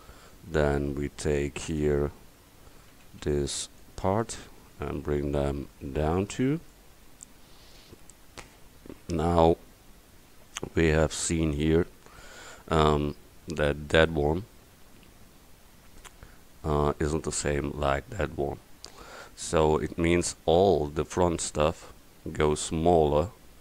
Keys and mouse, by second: 1.7-3.0 middle drag, 3.0 a, 3.5 c, 4.6 click, 8.0 middle click, 9.4-10.8 middle drag.